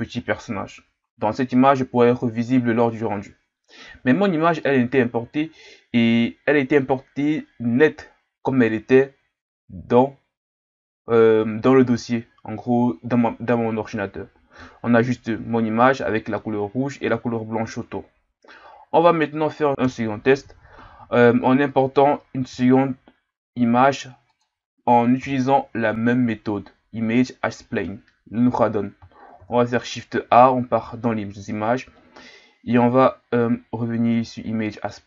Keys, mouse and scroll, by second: 5.6-8.7 scroll up 2, 19.8 KP_7, 21.1-22.5 scroll down 1, 22.5 g, 25.2 KP_1, 26.5-29.3 scroll down 1, 29.3 shift+a.